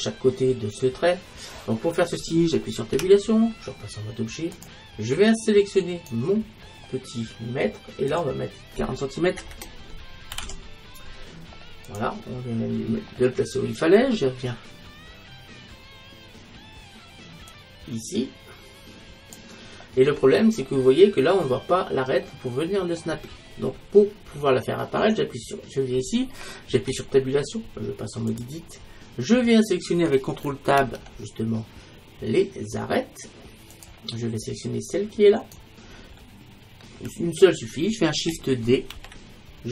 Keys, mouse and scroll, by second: 3.0 Tab, 5.9-7.9 right drag, 8.1-9.9 drag, 17.5-19.3 drag, 20.7-22.4 middle drag, 22.6-23.9 middle drag, 25.1-27.0 right drag, 27.0 Tab, 30.8 ctrl+Tab, 35.5-39.0 right drag, 39.0 shift+d.